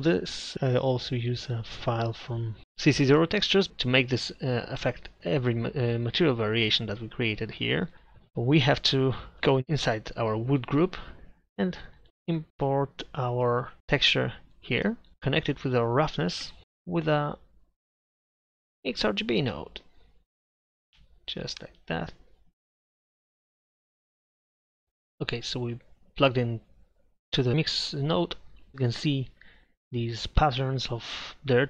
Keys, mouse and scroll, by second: 4.0-6.0 middle drag, 7.5 middle click, 7.9 click, 9.4 right click, 9.6 Tab, 15.1-16.4 drag, 16.4 shift+a, 20.9-22.7 drag, 22.7 middle click, 23.8 click.